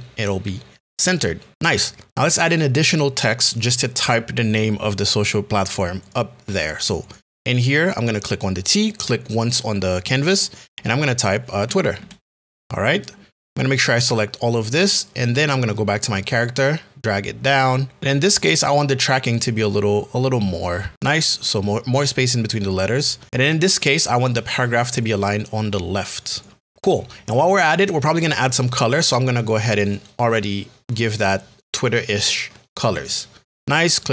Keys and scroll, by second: 11.6 t, 12.0 w, 12.6 r.